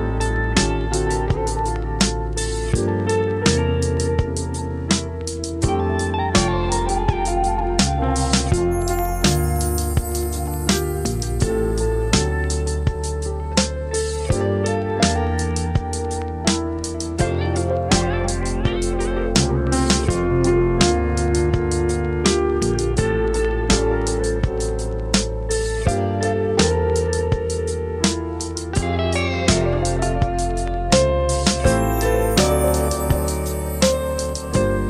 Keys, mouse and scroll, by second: 0.6-1.1 scroll up 1, 1.1 right click, 1.5 scroll down 1, 1.7 scroll up 1, 1.8 right click, 2.1 scroll down 1, 2.3 right click, 3.3 scroll up 1, 3.5 right click, 4.3 scroll down 1, 4.5 scroll up 1, 4.8 right click, 6.0 scroll down 1, 6.2 scroll up 1, 6.4 right click, 6.7 scroll down 1, 6.9 scroll up 1, 7.1 right click, 7.6 scroll down 1, 7.8 scroll up 1, 7.9-10.9 right drag, 10.9 click, 11.2 scroll down 1, 11.8 scroll up 1, 12.0 click, 12.3-13.2 scroll up 1, 12.9-13.8 typing, 14.4-15.5 scroll up 1, 15.5 click, 16.3 shift+click, 16.6 scroll up 1, 16.6-17.5 typing, 17.8 Return, 18.5-19.3 scroll up 1, 20.1 click, 21.1 shift+click, 21.5 scroll down 1, 22.8 click, 23.5-24.6 scroll up 1, 24.6 click, 27.3 right click, 28.0 scroll up 1, 28.2-30.5 right drag, 31.3 click, 31.3 right click, 32.3-32.7 scroll up 1, 32.7 right click, 33.2 scroll down 1, 33.5-34.0 scroll up 1, 34.0-34.8 shift+right drag.